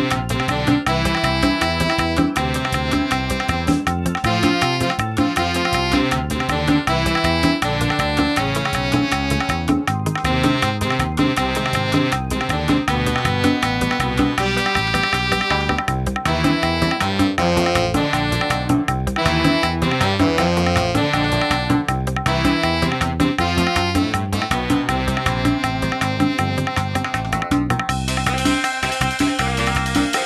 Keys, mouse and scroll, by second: 0.9 middle click, 1.7 n, 2.1 middle click, 3.1-3.4 scroll up 2, 3.4 middle click, 4.1 middle click, 4.7-5.7 scroll up 5, 8.3 middle click, 8.8 scroll up 1, 9.1 shift+middle click, 9.5-10.0 scroll up 4, 10.6-11.4 scroll up 2, 11.4 click, 18.8-20.5 scroll down 3, 20.5 click, 27.4 click.